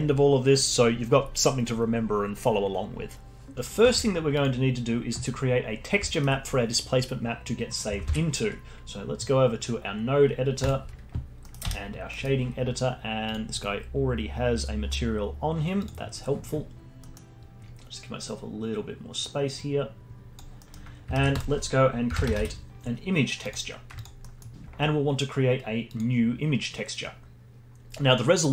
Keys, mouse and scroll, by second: 3.6 middle click, 3.8 Tab, 6.1-8.0 alt+middle drag, 8.0 ctrl+alt+s, 11.4 middle click, 11.6 n, 12.1-13.2 middle drag, 13.2 click, 14.1 scroll up 4, 14.4-14.8 scroll down 2, 15.7 click, 17.0-19.5 middle drag, 19.5-20.5 drag, 20.5 middle click, 21.1 shift+a, 24.2 middle click, 24.5 scroll up 4, 25.8-28.5 drag.